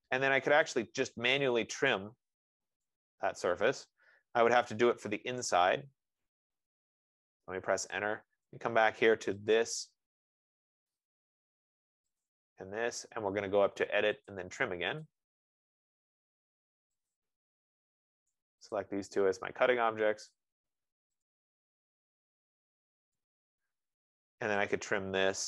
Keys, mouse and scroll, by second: 1.1 click, 2.2 click, 5.6 right click, 6.2 scroll down 5, 6.8-7.4 scroll up 5, 8.9 scroll up 1, 9.8 click, 9.8-10.4 scroll, 11.4 click, 19.2 click, 21.5 click, 22.9 click, 25.2 click.